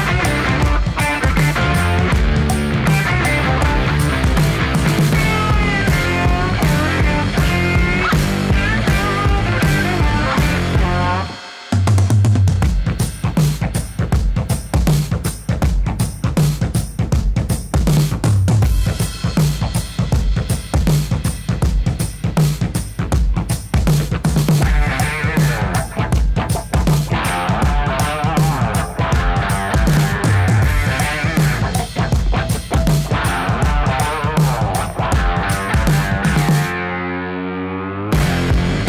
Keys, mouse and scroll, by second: 0.0 typing, 0.8-3.2 drag, 3.8 ctrl+space, 4.2-5.3 typing, 5.6 Return, 7.9 click, 11.2 click, 11.9 typing, 12.1 Return, 14.1-19.7 drag, 20.2 right click, 20.9 click, 21.3-23.7 typing, 22.5 Return, 24.2-25.9 drag, 26.5 ctrl+space, 27.0-28.0 typing, 28.6 Return, 31.7 click, 34.8-35.1 scroll up 1, 35.2-37.1 middle drag, 37.1 click, 37.6-38.8 typing.